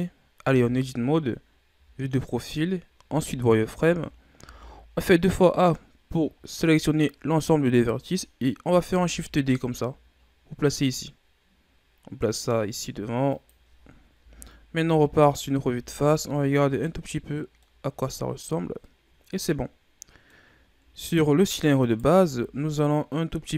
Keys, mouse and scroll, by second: 0.3 Tab, 1.7 KP_3, 3.0 z, 3.8 a, 4.3 a, 5.2-5.6 scroll up 4, 7.6-8.2 ctrl+scroll up 2, 8.7 shift+d, 14.1 KP_1, 14.8 z, 15.6 Tab, 16.1 a, 16.4-16.7 scroll down 3, 16.7-17.7 middle drag, 17.7-18.2 scroll up 3, 18.2-18.7 scroll down 1, 18.7-20.5 middle drag, 20.5-21.6 scroll up 4, 21.6 right click, 22.0 Tab, 22.5-23.0 ctrl+scroll up 2, 23.0-23.5 middle drag.